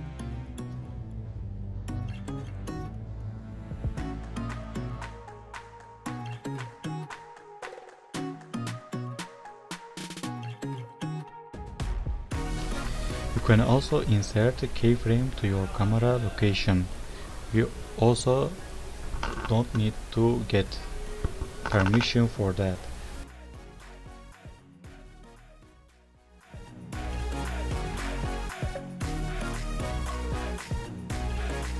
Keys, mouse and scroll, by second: 14.6 scroll down 1, 14.7-15.0 scroll up 1, 15.1 click.